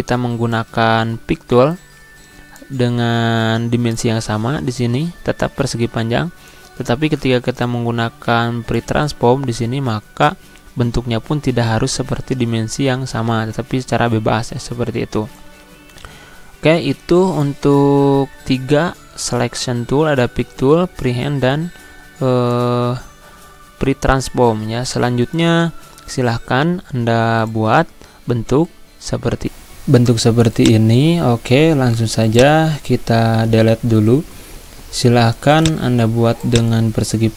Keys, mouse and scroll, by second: 25.0 click, 28.1-28.8 typing, 29.3 click, 30.6 click, 32.3 shift+click, 33.4 Delete, 35.6-37.3 drag.